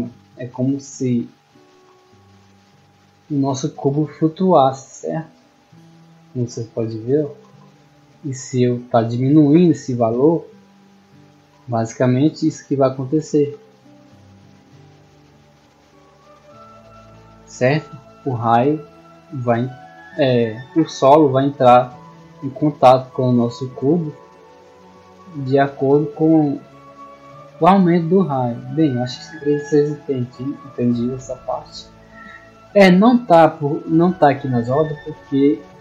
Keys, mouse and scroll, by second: 9.5-10.9 drag, 14.2-17.5 drag, 28.3-28.7 drag, 29.1-29.6 drag, 31.5 click, 33.0 right click, 34.1-34.5 middle drag, 35.0-35.3 shift+middle drag.